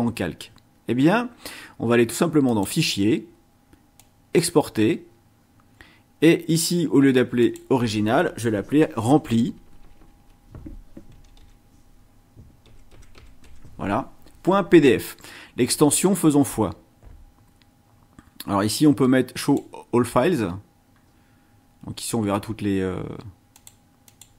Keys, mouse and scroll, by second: 2.4 click, 4.0 click, 7.4 click, 9.0 BackSpace, 10.9-13.9 typing, 19.4 click, 23.5 click, 24.0 click.